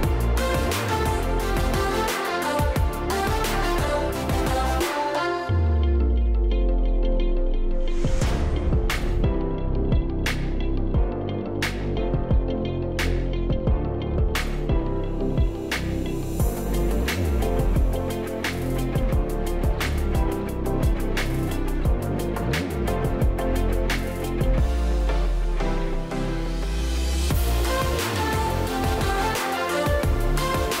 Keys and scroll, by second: 6.8 Delete, 13.3-14.3 space, 29.8 space.